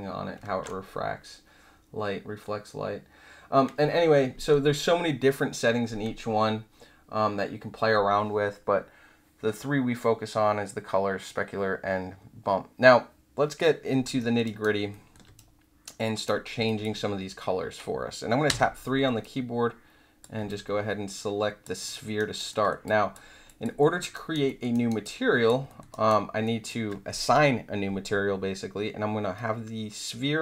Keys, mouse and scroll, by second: 0.4 ctrl+z, 14.1 alt+middle click, 14.4 alt+right click, 14.9 alt+middle click, 15.4-16.2 right drag, 16.6 alt+click, 18.4 3, 19.2-20.2 drag, 20.4-21.6 alt+drag, 21.8 alt+middle click, 22.1 alt+right click, 22.5 alt+middle click, 22.8 alt+click, 23.4 alt+click, 23.8 alt+middle click, 24.1 alt+right click, 24.4 alt+middle click, 24.7 alt+middle click, 25.0 alt+click, 25.6 alt+middle click, 25.9 alt+right click, 26.0-26.4 alt+middle drag, 26.6-27.8 alt+middle drag.